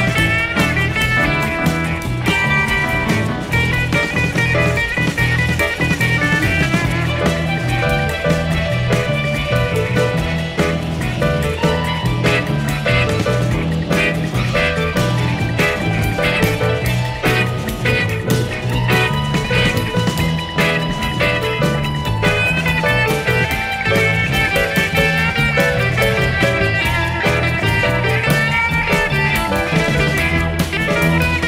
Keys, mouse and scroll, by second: 1.9 BackSpace, 6.4 click, 7.0 click, 7.8 click, 9.5 F1, 10.2 shift+click, 11.2 ctrl+KP_Subtract, 12.2 click, 12.5 space, 15.0 shift+F6, 17.8 click, 18.8 click, 20.2 click, 21.1 click, 22.4 F1, 24.4 click, 25.2 click, 26.5 click, 28.0 F1, 28.9 shift+click, 29.9 ctrl+KP_Subtract, 30.9 click.